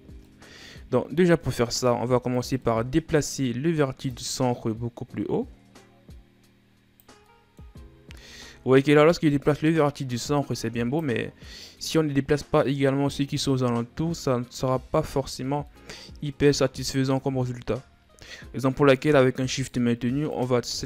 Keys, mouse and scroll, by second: 0.0-2.1 middle drag, 2.1 right click, 2.4-3.9 middle drag, 3.9-6.9 drag, 7.1 middle click, 8.0 ctrl+z, 9.3-11.4 drag, 11.4-14.4 middle drag, 14.9 ctrl+z, 15.5 middle click, 15.9-16.6 scroll up 1, 16.6-17.3 scroll up 2, 17.3-18.8 scroll down 3, 18.8-19.3 scroll down 1, 19.3 shift+right click, 20.1 shift+right click.